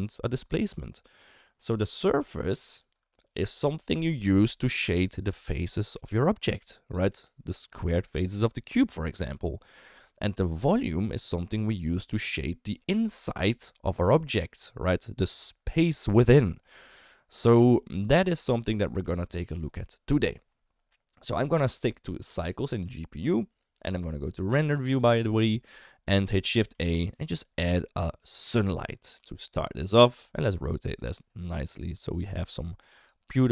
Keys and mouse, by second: 2.1 shift+middle click, 5.3 d, 5.5-8.4 drag, 8.4 d, 8.6 d, 8.8-11.6 right drag, 11.6 d, 12.3 middle click, 13.1 shift+middle click, 13.6 middle click, 14.5 shift+middle click, 16.2 shift+middle click, 16.6 middle click, 17.4 shift+middle click, 17.7 middle drag, 18.3 shift+middle click, 18.8 middle click, 19.2 shift+middle drag, 22.6-23.3 drag, 24.7 click, 26.7 shift+a, 29.2 r, 30.2 g, 31.1 middle click, 31.9 r, 32.5 g, 33.2-33.5 middle drag.